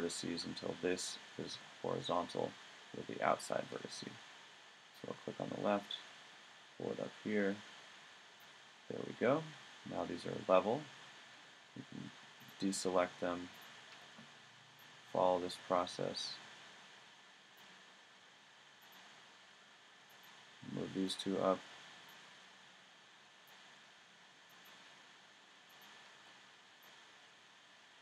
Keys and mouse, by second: 10.5 middle click, 12.4-13.5 right drag, 19.0-21.9 middle drag, 23.5 click, 23.8 click, 25.3-26.8 drag.